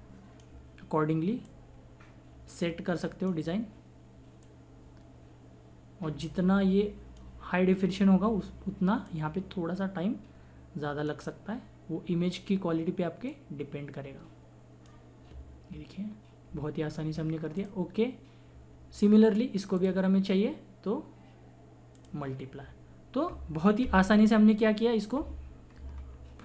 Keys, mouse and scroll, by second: 13.3-17.0 drag, 17.5 click, 19.7 click, 21.9 click, 25.8 click, 26.0 ctrl+-.